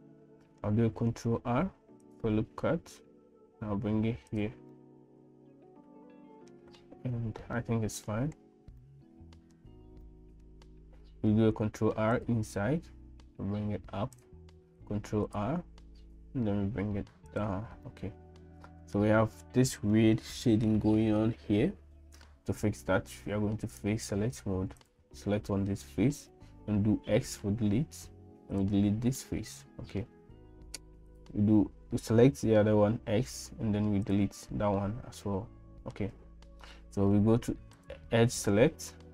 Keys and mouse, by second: 0.0 middle click, 1.4 ctrl+r, 4.7-6.8 middle drag, 7.6 middle click, 8.8-9.9 middle drag, 10.1 shift+middle click, 11.5 ctrl+r, 14.8 ctrl+r, 17.9-19.0 middle drag, 19.9 middle click, 23.8-24.9 drag, 27.0 x, 29.2-31.1 middle drag, 32.9 x, 34.8-36.4 middle drag.